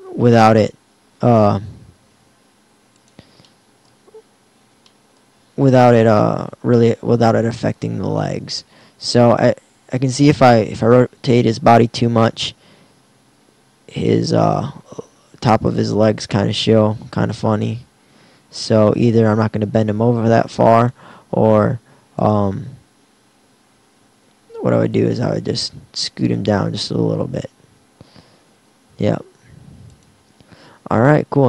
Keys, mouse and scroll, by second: 0.4 r, 4.1 KP_1, 6.4 r, 15.0 r, 15.8-17.2 drag, 16.7 r, 17.8 r, 21.5 r, 23.2 alt+r, 26.9 r, 31.3 r.